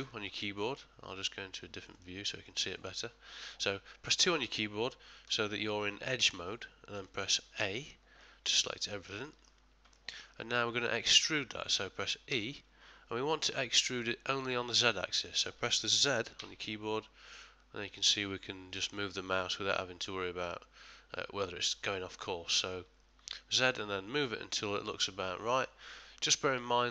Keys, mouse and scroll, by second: 0.0 2, 2.0 click, 3.6 middle click, 5.2 2, 5.8 middle click, 7.6 a, 8.2 middle click, 8.8 ctrl+middle click, 9.2 shift+middle click, 10.0 middle click, 10.6 middle click, 12.3 e.